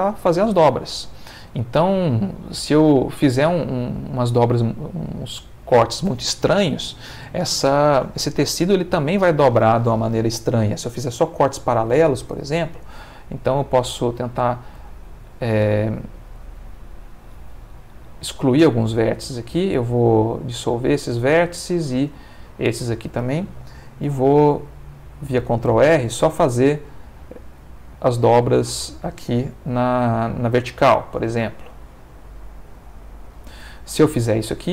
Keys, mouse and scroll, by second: 12.6 ctrl+z, 14.0 ctrl+z, 15.0 ctrl+Tab, 16.2 a, 17.2 click, 19.2 x, 20.5 click, 21.2 click, 21.9 x, 22.5 click, 24.1 ctrl+r, 26.0-26.8 scroll up 4, 27.3 scroll up 2, 28.0 click, 29.5 ctrl+r, 30.8-31.3 scroll up 2, 32.3 click, 33.0 click.